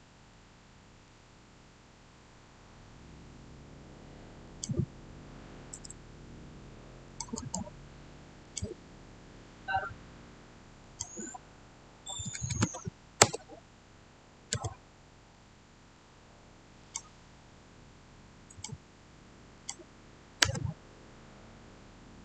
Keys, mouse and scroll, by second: 0.2-3.2 middle drag, 4.3 middle click, 4.4 click, 5.7 Return, 7.0 click, 7.3 right click, 8.3 click, 10.7 click, 12.1-13.0 typing, 13.1 Return, 15.2-16.7 middle drag, 16.7 click, 17.3-18.4 scroll up 1, 18.4 click, 20.3 Return.